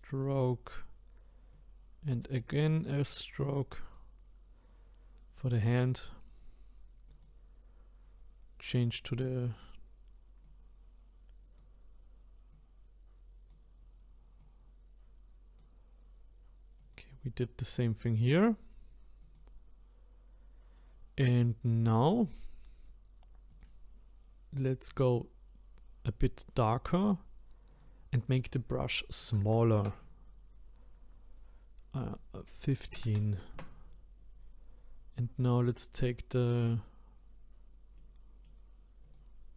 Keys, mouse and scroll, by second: 7.1 click, 10.4-19.3 drag, 23.5 click, 27.7-30.7 drag, 32.0-35.0 drag, 37.9-39.0 middle drag, 39.0-39.5 drag.